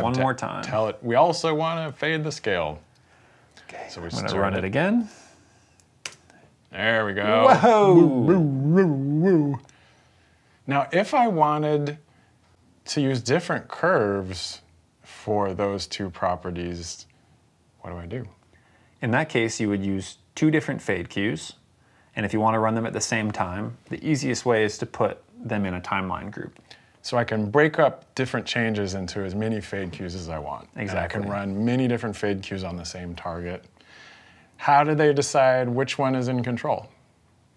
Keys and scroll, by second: 2.7 s, 4.1 v, 5.9 space.